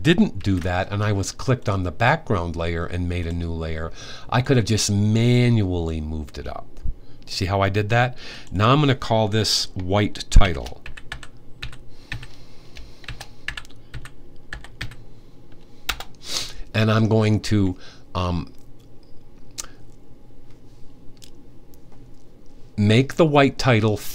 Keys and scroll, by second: 0.1 super+z, 9.9-14.6 typing.